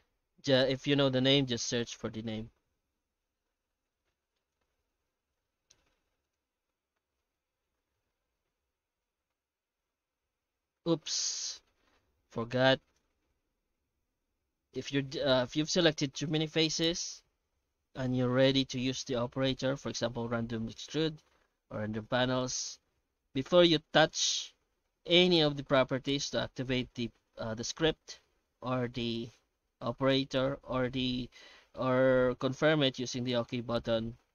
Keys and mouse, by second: 3.4 Tab, 4.4 shift+middle click, 5.1 shift+q, 13.4 ctrl+z, 14.3 Tab, 17.6 Tab, 18.3 shift+q.